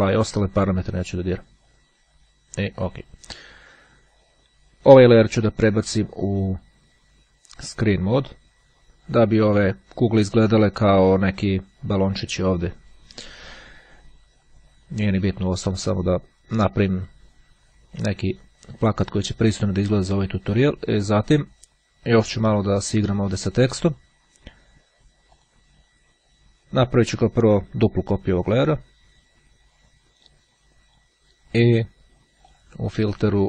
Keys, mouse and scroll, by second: 2.7 click, 5.6 click, 7.6 click, 25.5 click, 28.3-29.4 drag, 32.6 click.